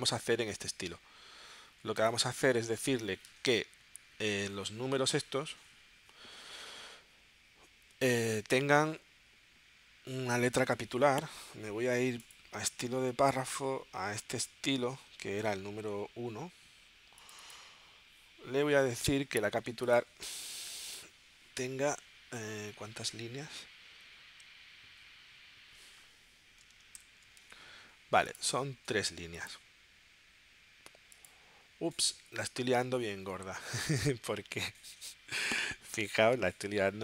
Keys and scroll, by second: 27.0 shift+super+p.